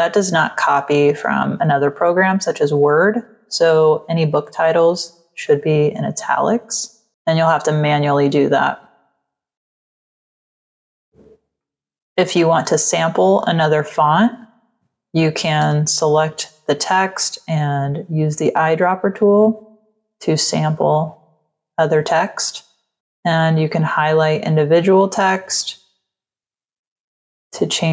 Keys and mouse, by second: 5.3 click, 6.1 click, 7.7 click, 9.8 click, 10.5 click, 11.5 click, 13.8 click, 15.6 ctrl+a, 19.0 click, 20.7 click, 23.5 click, 24.7 click, 26.4 click.